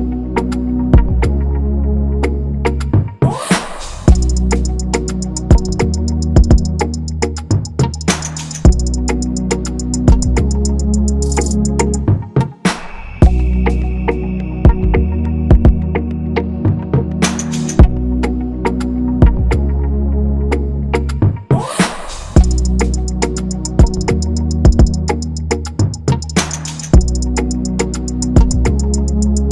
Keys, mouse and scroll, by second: 0.4 double click, 5.9 shift+Down, 9.3 ctrl+=, 9.6 ctrl+-, 10.8 right click.